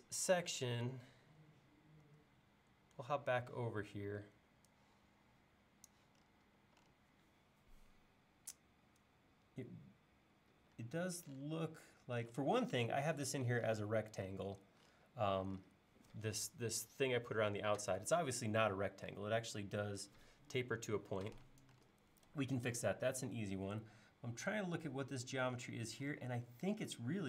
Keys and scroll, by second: 2.1 super+Tab.